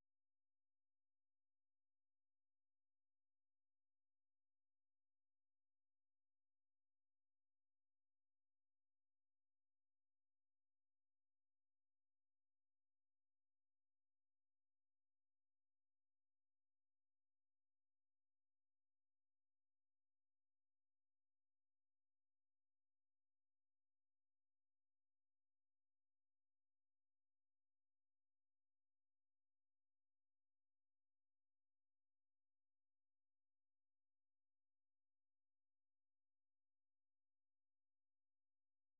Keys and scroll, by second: 3.5 ctrl+c, 4.0 super+1, 4.5 ctrl+v, 5.3 Escape, 6.0 ctrl+v, 6.4 Return, 11.1 alt+Tab, 12.9-14.6 typing, 30.3 alt+Tab.